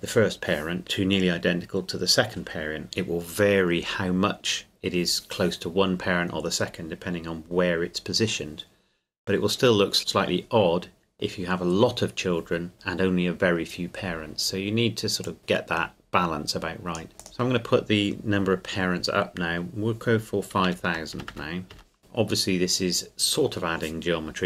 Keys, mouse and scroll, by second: 15.2 click, 20.6 KP_5, 21.1 KP_0.